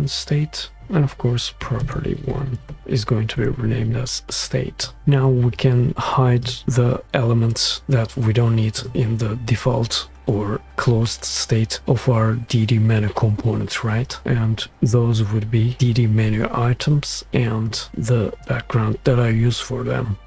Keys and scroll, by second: 0.0-0.2 typing, 0.8 Return, 2.8 typing, 4.6 Return.